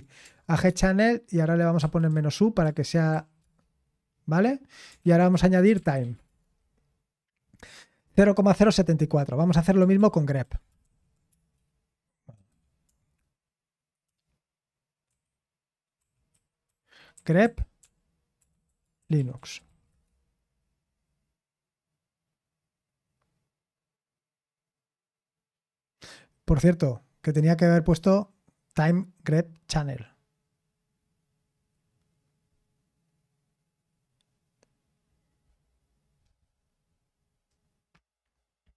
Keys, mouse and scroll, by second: 0.7-3.1 typing, 3.4 Return, 5.0 ctrl+p, 5.0-6.7 typing, 5.2 ctrl+a, 10.0 ctrl+p, 10.4 ctrl+a, 10.8 alt+f, 11.3-13.0 typing, 15.1 ctrl+e, 16.0 ctrl+w, 16.3 ctrl+w, 17.1 c, 19.1-20.4 typing.